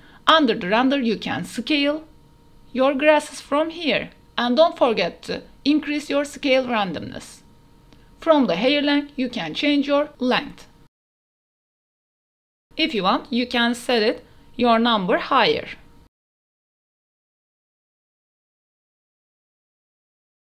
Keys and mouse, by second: 0.5-4.4 drag, 4.8 click, 5.5 click, 6.7 click, 7.6 click, 7.8 a, 7.8 a, 8.1 KP_0, 8.7 ctrl+s, 9.4 drag, 9.9 shift+drag, 10.4 shift+click, 11.7 KP_0, 11.8 a, 12.4 click, 12.4 a, 13.7-15.2 drag, 14.6 KP_0, 16.0 a, 16.2 a, 16.8 click, 18.0 click, 19.2 a, 19.3 a, 19.5 ctrl+s, 19.8 shift+drag, 19.9 click.